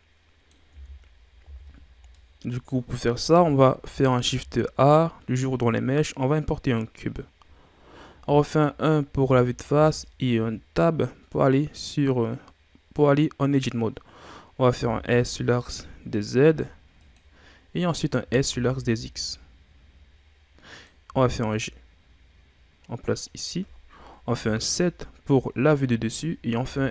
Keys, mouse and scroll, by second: 0.7 Tab, 1.4 a, 1.9 scroll down 1, 2.1-3.3 middle drag, 3.3 KP_7, 4.2 shift+a, 8.1 KP_1, 9.7 Tab, 13.0-14.7 scroll up 1, 14.7 s, 17.4 scroll up 2, 18.2 s, 21.1 g, 24.4 KP_7, 25.6-26.5 shift+scroll down 4, 26.6 s.